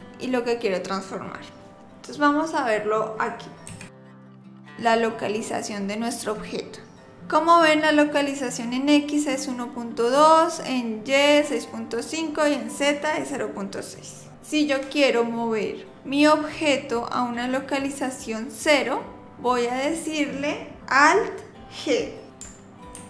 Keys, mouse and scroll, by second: 3.7 n, 3.9 click, 22.9 alt+g.